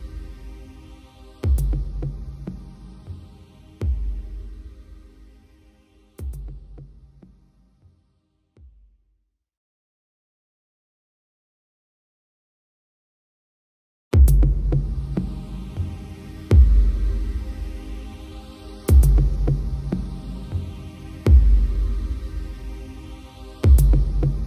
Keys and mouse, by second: 0.7 right click, 1.4 right click, 1.9 right click, 2.8 right click, 3.0 right click, 3.6 right click, 3.9 right click, 4.4 right click, 4.6 right click, 5.0 right click, 5.4 right click, 6.6 right click, 7.2 right click, 8.0 right click, 8.5 b, 9.8 right click, 10.6 right click, 10.9 right click, 11.8 right click, 13.3 right click, 13.6 right click, 14.2 right click, 14.7 right click, 15.2 b, 15.9 right click, 16.2 right click, 16.5 right click, 18.1 right click, 18.3 right click, 18.8 right click, 19.4 right click, 20.4 right click, 21.3 right click, 21.8 right click, 22.2 b, 23.0 right click, 23.6 right click, 24.1 right click.